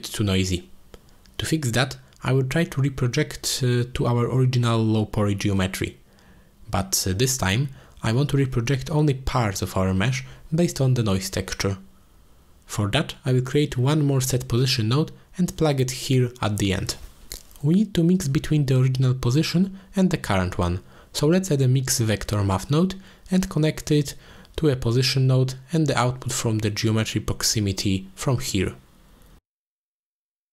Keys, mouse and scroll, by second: 2.0 click, 2.2-3.4 drag, 3.5 click, 4.6 click, 5.4 shift+d, 8.2 click, 8.8 click, 15.7 click, 16.9 click, 18.1 middle click, 19.9 shift+a, 24.7 middle click, 26.1 click, 26.5-30.5 drag.